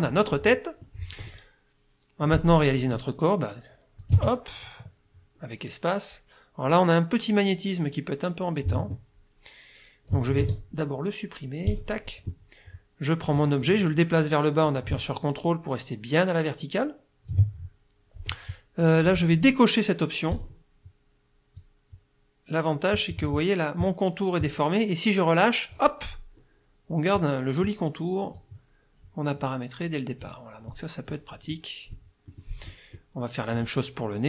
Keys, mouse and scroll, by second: 0.3 middle click, 4.0-10.3 drag, 4.1 space, 10.4 ctrl+z, 11.7 click, 13.3-17.5 drag, 20.4 click, 21.6-26.0 drag, 28.4-30.5 drag, 30.7 middle click, 30.7-31.3 scroll up 1, 31.5 middle click, 31.5-32.1 scroll up 1, 32.3 middle click, 32.3 scroll up 1, 32.7 click, 33.5 click.